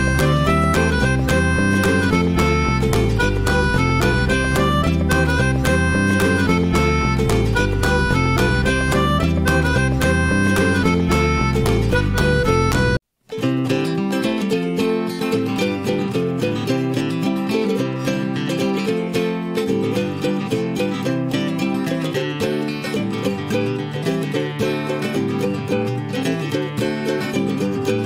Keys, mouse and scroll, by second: 2.6-6.4 middle drag, 6.4 ctrl+shift+x, 9.7-16.2 middle drag, 16.4 alt+middle drag, 17.1-19.5 middle drag, 19.8-20.8 middle drag, 20.8 click, 21.3 middle click, 22.1-22.5 drag, 22.5-22.8 shift+middle drag, 23.1 alt+middle click, 23.5-24.4 shift+middle drag, 24.4-24.8 shift+right drag, 24.8-26.4 middle drag, 26.4-26.8 scroll up 2.